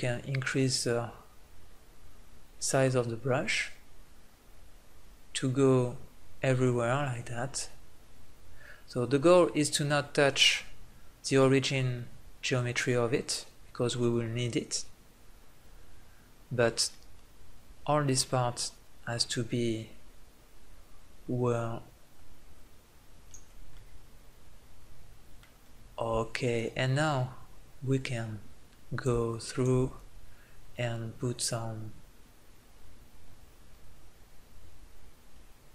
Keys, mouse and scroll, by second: 23.5-25.2 middle drag, 26.6-28.5 drag, 29.3-35.7 drag.